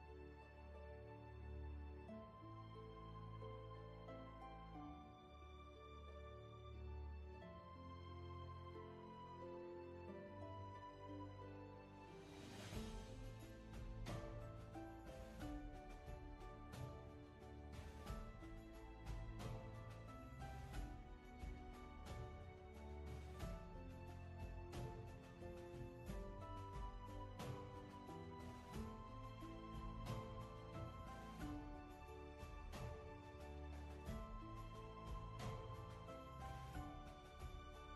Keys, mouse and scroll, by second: 2.9 ctrl+z, 6.3 ctrl+z, 13.6 ctrl+z, 19.2 ctrl+z, 27.0 space, 32.4 scroll down 1, 36.2 ctrl+z.